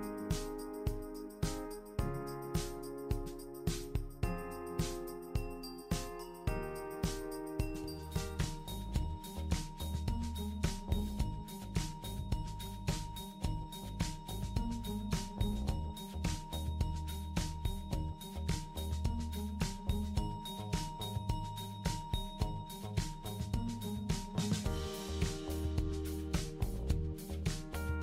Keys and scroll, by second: 13.9 BackSpace, 27.0 super+d.